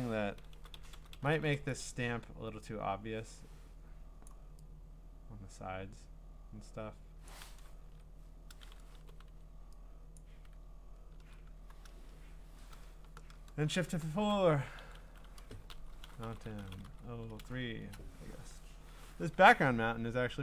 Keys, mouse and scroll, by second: 0.6-1.5 typing, 4.3 click, 7.9-9.8 typing, 10.2 click, 10.8 scroll, 11.6 typing, 13.5 F4, 14.8-17.4 typing, 17.8 Return.